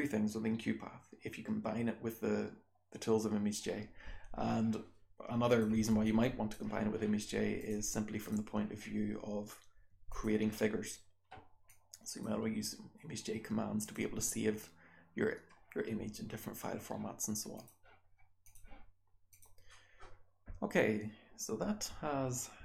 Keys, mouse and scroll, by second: 5.4 click, 5.7 r, 6.0-6.5 drag, 6.0-7.5 scroll down 1, 7.5 click, 7.5-8.2 scroll down 1.